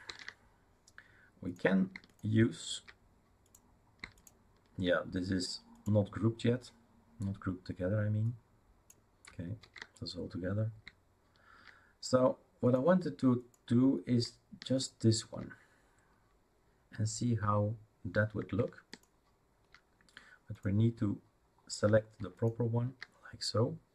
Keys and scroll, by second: 0.1 ctrl+z, 9.6 ctrl+z.